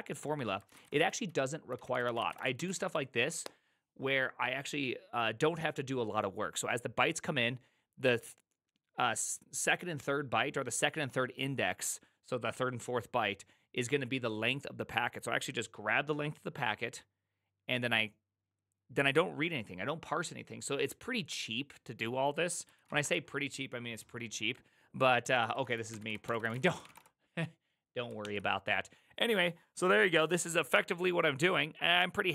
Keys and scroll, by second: 0.4-3.3 typing, 22.6-23.4 typing, 25.2-27.3 typing, 28.2 ctrl+o.